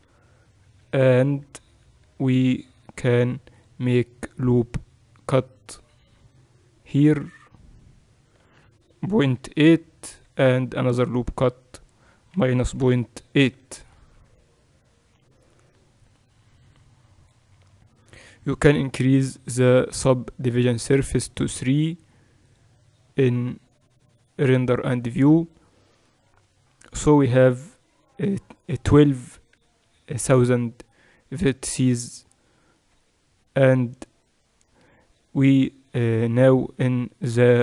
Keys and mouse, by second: 0.8 Tab, 2.3 ctrl+r, 10.7 ctrl+r, 14.0 Tab, 16.8-20.1 drag, 21.3-37.6 drag.